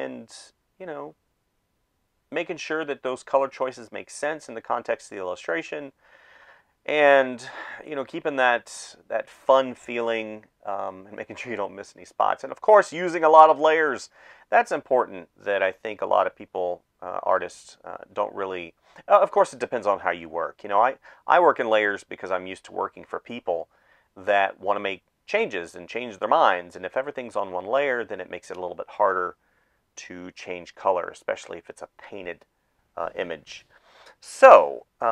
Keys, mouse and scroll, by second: 0.3 space, 0.9 space, 1.9 space, 2.9 space, 5.1 space, 7.1 space, 7.7 ctrl+s, 9.4 ctrl+z, 9.8 space, 11.4 space, 14.0 space, 15.6 space, 16.3 space, 16.8 space, 19.6 space, 21.3 space, 22.2 space, 22.7 space, 25.1 space, 25.3 space, 29.4-32.6 typing.